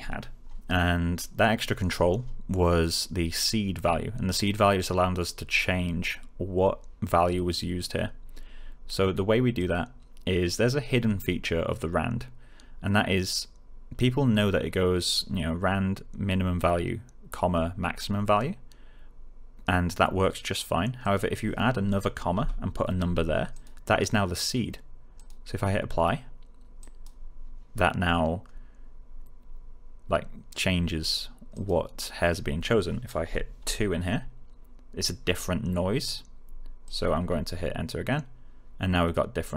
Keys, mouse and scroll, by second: 9.5 click, 21.0 click, 22.3 ,, 23.5 click, 31.5 click, 33.5 2, 36.8 click.